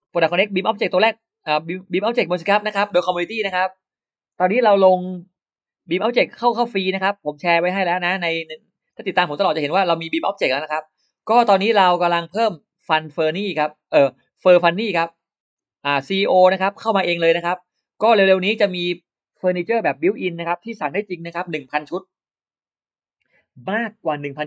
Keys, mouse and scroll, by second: 2.4 click, 4.2 click, 6.7 click, 7.8 click, 10.3 click, 14.4 click, 16.2 click, 17.7 click.